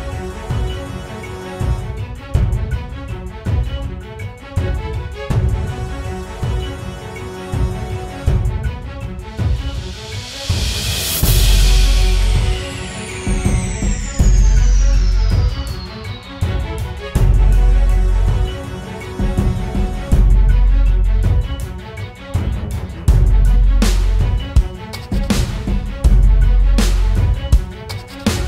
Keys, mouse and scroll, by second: 13.6 double click.